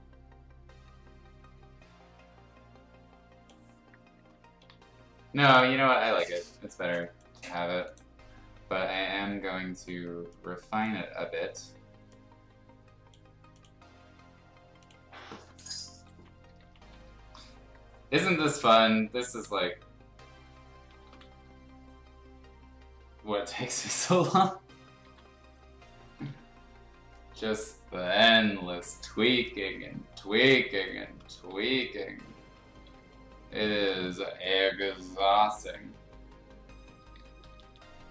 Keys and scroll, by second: 4.7 ctrl+z, 6.6 space, 7.5 b, 15.8-16.9 typing, 19.4 ctrl+z, 21.0 ctrl+z, 23.9 x, 25.0 ctrl+z, 26.3 x, 28.1 ctrl+z, 28.8 x, 31.3 z, 33.8 ctrl+z, 34.7 ], 34.9 ], 36.9-37.8 typing.